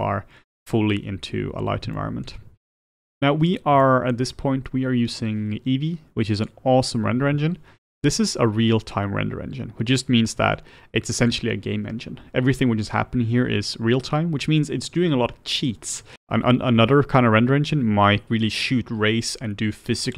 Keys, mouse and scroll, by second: 0.3-1.6 scroll up 3, 1.6-2.0 scroll up 1, 2.0-3.3 shift+middle drag, 3.3-3.8 scroll down 1, 3.8-20.1 shift+middle drag.